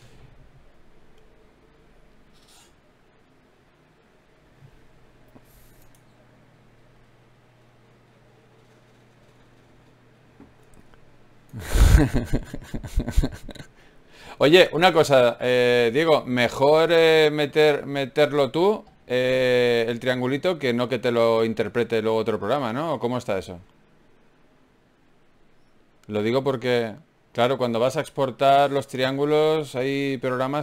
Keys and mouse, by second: 0.2 f, 1.8 ctrl+r, 4.6 right click, 5.4 f, 6.1 f, 6.6 f, 15.7 ctrl+r, 18.9 click, 19.3 right click, 19.9 f, 20.3 middle click, 21.1 f, 21.6 middle click, 21.9 ctrl+z, 29.7-30.6 drag.